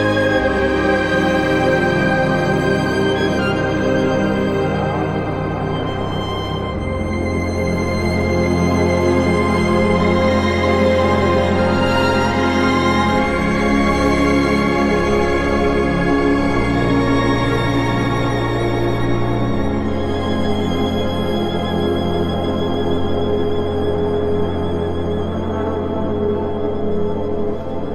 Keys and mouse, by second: 0.1 g, 0.6 click, 0.8 2, 2.2 alt+shift+click, 4.6 alt+shift+click, 7.7 alt+shift+click, 10.4 alt+shift+click, 12.4 alt+shift+click, 14.2 alt+shift+click, 16.3 alt+shift+click, 16.8 alt+z, 22.6 e, 22.9 x, 25.3 click.